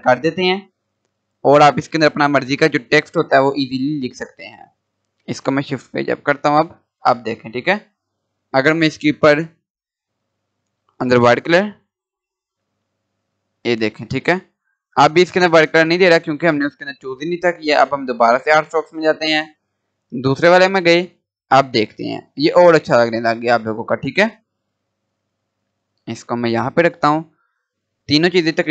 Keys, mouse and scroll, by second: 0.5 scroll down 1, 1.4-6.4 drag, 6.4 shift+Page_Up, 10.6 click, 12.4-12.7 scroll up 1, 16.7 click, 22.1 scroll down 1, 23.3-24.8 drag, 24.8 scroll up 1, 25.7-28.7 drag.